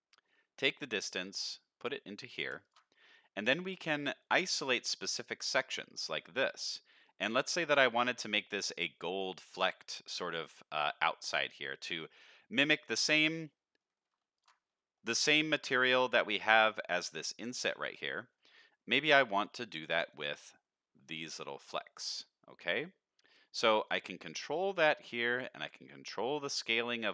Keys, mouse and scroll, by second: 0.2-1.8 drag, 2.1 drag, 3.4-3.9 drag, 4.4-5.7 drag, 6.1-6.6 drag, 7.0 click, 7.7 click, 9.1 middle click, 10.1 middle click, 11.1 middle click, 12.7 middle click, 13.3 middle click, 13.7 middle click, 14.4 ctrl+shift+click, 14.9 middle click, 15.4 middle click, 16.4 scroll up 1, 18.1 middle click, 18.6 middle click, 18.9 middle click, 19.4 click, 20.5 middle click, 21.7 middle click, 22.6 click, 23.6 click, 24.5 click, 25.9-27.1 shift+drag.